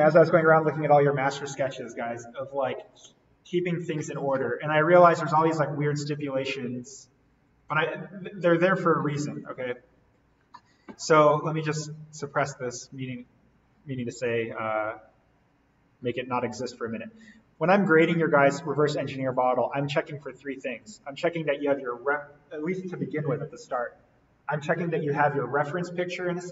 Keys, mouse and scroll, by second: 5.9-7.4 drag, 7.4 right click, 9.4 click, 10.2-10.8 scroll down 1, 10.8-11.3 scroll up 1, 11.3 right click, 12.1 click, 12.9-13.5 scroll down 1, 13.5-14.3 scroll up 1, 15.3-15.8 scroll down 1, 15.8-17.5 scroll up 1, 17.5 click, 19.1 ctrl+click.